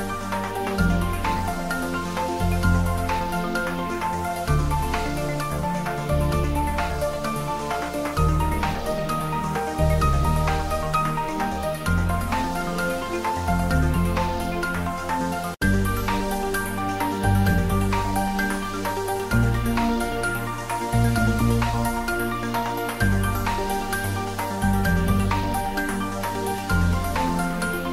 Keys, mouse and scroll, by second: 1.4 click, 3.2 click, 7.5 click, 9.3-9.8 scroll down 1, 10.5 click, 11.3-11.9 scroll down 1, 12.0 click, 13.4-14.2 typing, 14.2 ctrl+middle click, 15.0 ctrl+middle click, 16.0-23.5 drag, 23.5 Tab, 23.5 click, 25.0 click, 27.5 click.